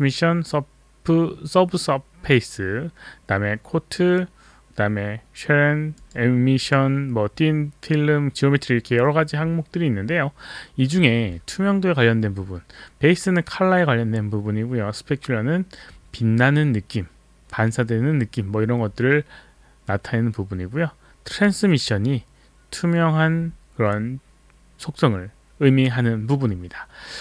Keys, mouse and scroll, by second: 5.9 click, 6.6 click, 21.3 click.